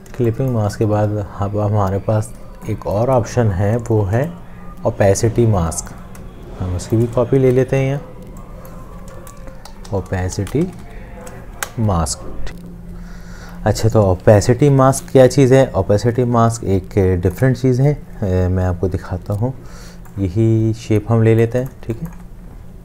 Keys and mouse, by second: 0.1 space, 5.9 alt+click, 7.4 t, 9.7-10.6 typing, 16.3 space, 17.2 click, 18.3 space, 21.8 space.